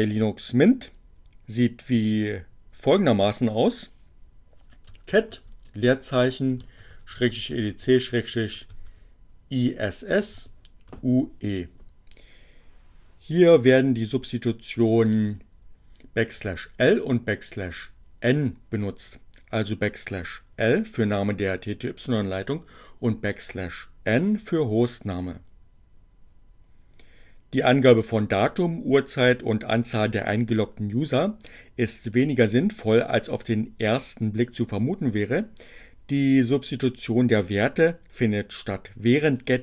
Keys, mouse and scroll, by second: 3.0-4.1 typing, 6.1-10.4 typing, 10.9 Return.